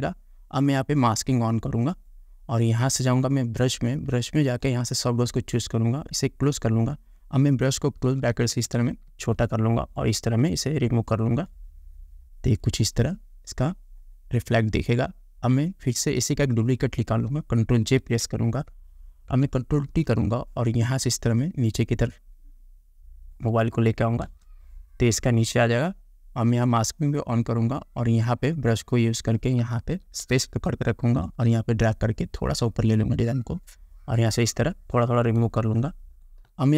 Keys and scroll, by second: 18.3 ctrl+j, 20.2 ctrl+t, 24.5 Return, 30.6 space, 35.9 space.